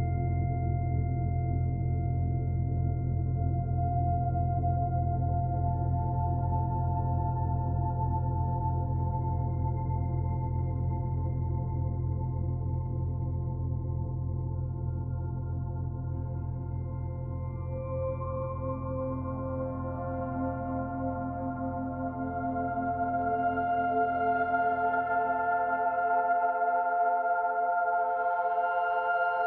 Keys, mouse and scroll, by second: 1.2 click, 3.6 click.